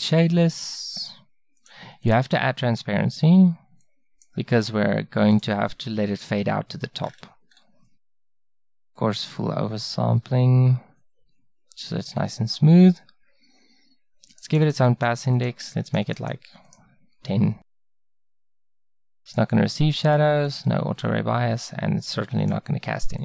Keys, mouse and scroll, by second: 0.2-10.9 drag, 14.3-23.2 drag.